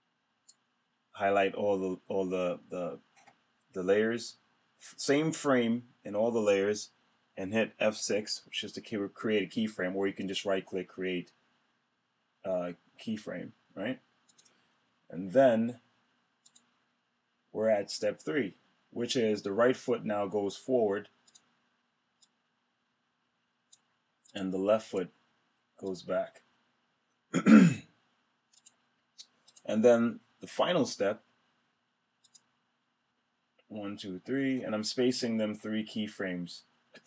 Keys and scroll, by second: 8.0 F6.